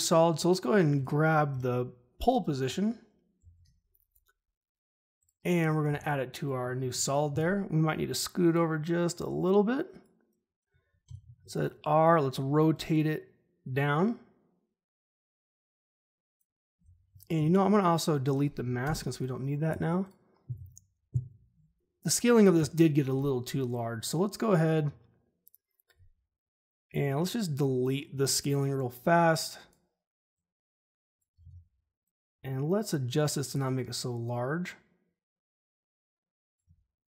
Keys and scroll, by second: 1.5 p, 3.4 ctrl+c, 5.8 ctrl+v, 11.0 r, 17.3 m, 18.8 Delete, 21.7 u, 32.8 ctrl+z.